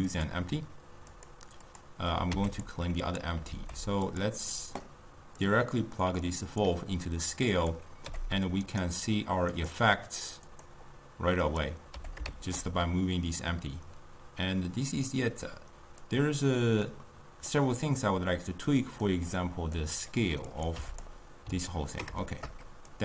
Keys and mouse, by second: 0.1 click, 1.7 click, 2.4 x, 3.1 click, 3.6 alt+g, 4.1 click, 5.5-7.7 drag, 8.1 g, 9.6 click, 10.6 click, 11.6 click, 12.1 g, 16.9-20.6 middle drag, 20.6 click, 21.9-23.0 ctrl+middle drag.